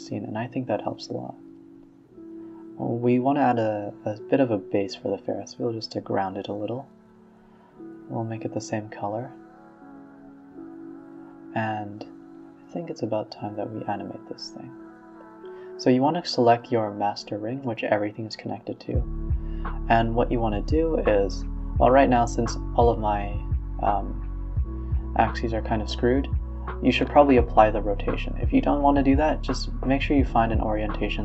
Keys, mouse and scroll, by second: 0.1 click, 0.7 shift+a, 1.9 g, 2.8 s, 3.9 s, 5.7 click, 6.6 g, 7.0 a, 7.2 a, 9.1-9.7 scroll down 16, 9.7 z, 10.2-10.6 scroll up 1, 10.6-11.2 middle drag, 10.7-11.2 scroll up 1, 11.2 click, 13.2-13.6 middle drag, 13.6 KP_1, 14.2 KP_3, 14.7 KP_0, 18.5 r, 21.3 click, 22.1-26.9 drag, 26.9 ctrl+z, 28.2 r, 30.2-31.2 drag.